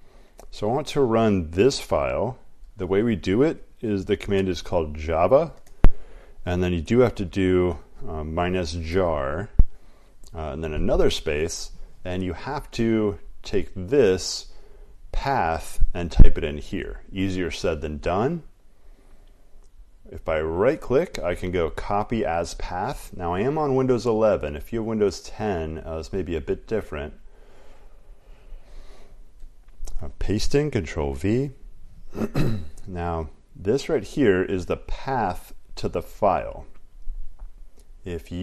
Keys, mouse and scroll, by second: 1.0 click, 2.0 click, 3.5-4.9 typing, 4.9 click, 6.7-9.0 typing, 13.6 click, 16.4 click, 20.1 right click, 28.2 click, 28.7 click, 30.1 ctrl+v, 37.1 click.